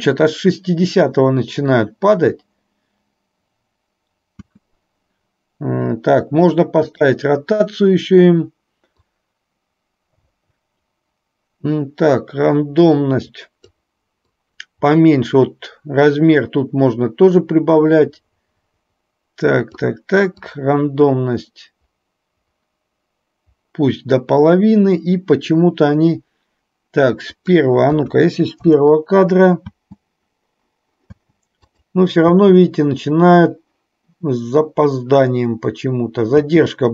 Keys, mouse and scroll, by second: 4.5 space, 6.9 click, 9.0-13.8 drag, 14.4-19.8 drag, 20.5-24.3 drag, 27.4-28.8 drag, 29.8 space, 31.8 drag, 31.8 space, 36.5 space.